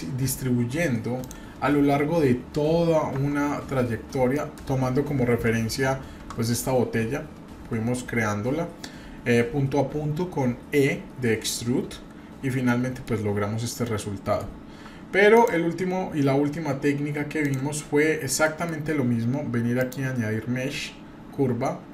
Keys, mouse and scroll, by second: 1.2 drag, 3.2 Tab, 4.3 middle click, 5.2 KP_7, 12.6 middle click, 13.5 scroll down 1, 13.8 middle click, 14.8 Tab, 15.3 click, 17.4 drag, 18.4 middle click, 19.8-21.9 drag.